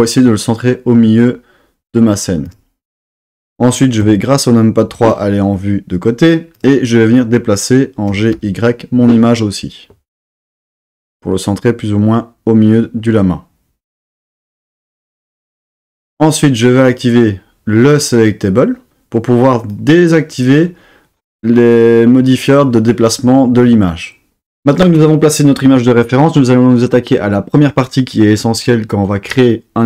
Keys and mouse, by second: 2.5 click, 4.0 KP_3, 6.5 click, 8.0 g, 8.3 y, 15.0 click, 16.8-18.7 drag, 19.7 click.